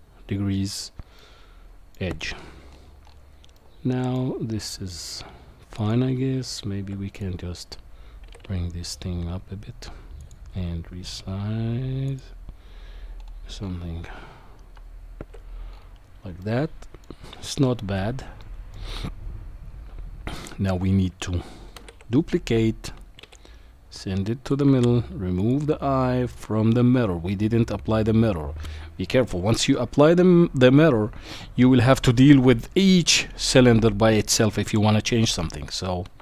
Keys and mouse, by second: 1.2 middle click, 3.5 middle click, 5.8 click, 6.9 Tab, 7.1 click, 8.3 g, 11.3 s, 14.7 Tab, 16.4-17.0 middle drag, 18.4-18.7 shift+middle drag, 21.7 shift+d, 25.4 click, 34.6 KP_7.